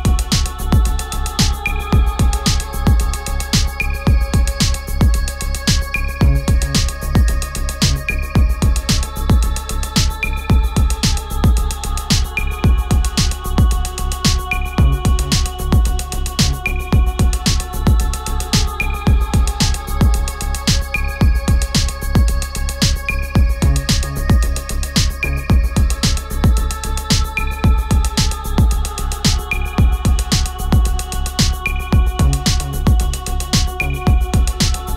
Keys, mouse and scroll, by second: 0.3 click, 8.5-12.6 typing, 15.7-21.7 drag, 26.4 ctrl+a, 29.9 click.